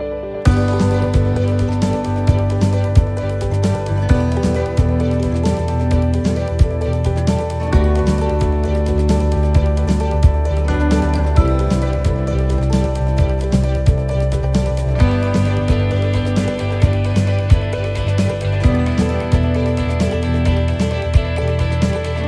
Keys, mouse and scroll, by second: 4.3-5.2 scroll up 1, 5.8-6.4 scroll up 2, 7.8 scroll down 1, 8.7 middle click, 8.7-9.0 scroll up 1, 11.3 middle click, 11.3 scroll down 1, 11.4 g.